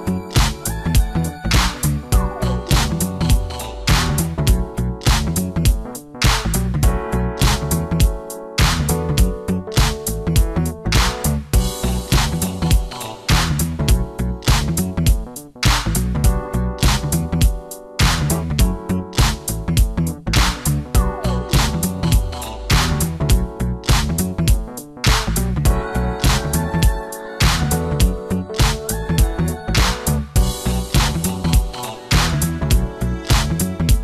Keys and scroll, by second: 11.2 ctrl+alt+d, 11.5 2, 11.7 Return, 12.5 shift+F2, 13.0 ctrl+d, 13.9 space, 14.9 f, 15.2 space, 21.1 Return, 21.8 shift+F2, 23.1 space, 24.1 space, 25.3 ctrl+m, 26.9 Return.